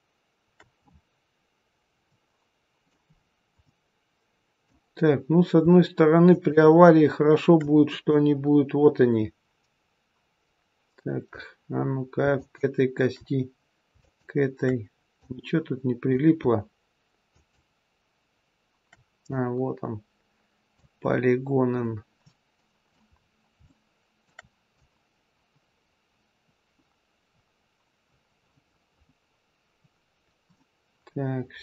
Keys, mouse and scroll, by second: 0.7-1.9 scroll up 4, 1.9 scroll up 1, 2.0 middle click, 3.0-3.6 scroll down 1, 3.6 middle click, 3.6 scroll down 2, 4.8 scroll down 1, 6.1 shift+click, 7.9 click, 12.3 shift+click, 15.1 click, 17.3 shift+click, 19.3 click, 22.1 middle click, 23.0-23.5 scroll up 4, 23.5 shift+middle click, 24.7 click.